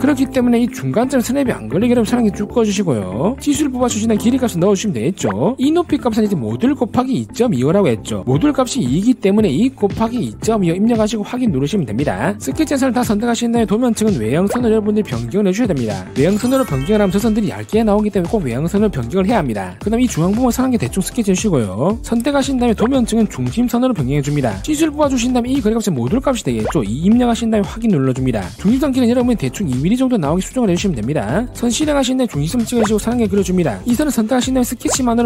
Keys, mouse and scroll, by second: 2.6 click, 3.8 click, 4.5 click, 5.2 click, 12.0 click, 13.2 click, 14.7 click, 16.1 click, 21.1 click, 22.0 click, 22.4 click, 23.1 click, 24.6 click, 24.9 d, 25.3 click, 25.8 click, 26.7 click, 27.8 2, 28.3 click, 29.0 click, 30.3 click, 31.1 click, 32.4 1, 33.3 click, 34.5 click.